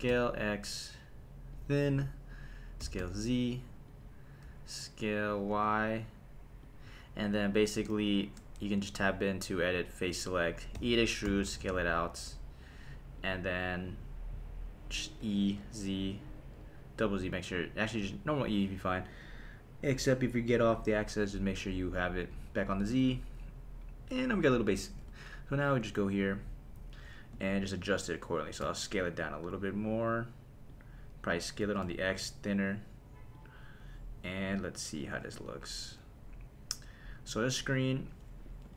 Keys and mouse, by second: 0.3 x, 1.5 click, 2.8 s, 3.0 z, 3.9 click, 4.5 s, 5.5 y, 6.6 click, 8.6 Tab, 10.0 click, 10.8 e, 11.3 s, 13.2 click, 15.2 e, 15.6 z, 16.5 z, 20.3 click, 22.8 Tab, 25.0 /, 28.6 s, 30.7 click, 31.6 s, 31.8 x, 33.3 click, 38.0 click, 38.6 g.